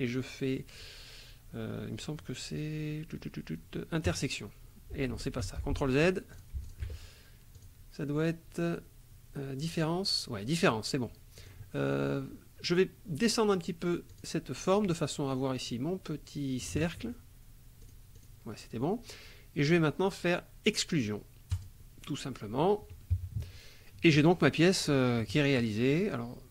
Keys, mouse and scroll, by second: 4.0 click, 5.4 ctrl+z, 6.3 click, 6.6 shift+click, 7.5 click, 9.6 click, 11.4 click, 14.1 click, 16.7 shift+click, 17.8 click, 19.7 click, 21.5 click, 23.1 KP_Subtract.